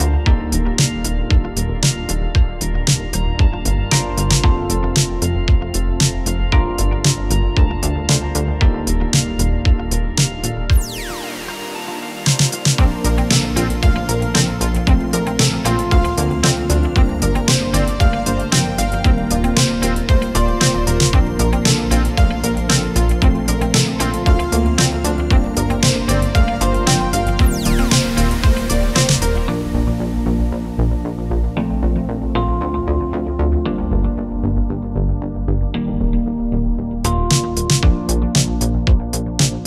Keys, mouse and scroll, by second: 1.2-2.4 drag, 3.8 ctrl+d, 5.2-6.6 drag, 7.1 u, 9.1 click, 14.2 Delete, 16.0-20.5 drag, 23.4-25.0 drag, 33.0 click, 33.7 p, 35.0-39.4 drag.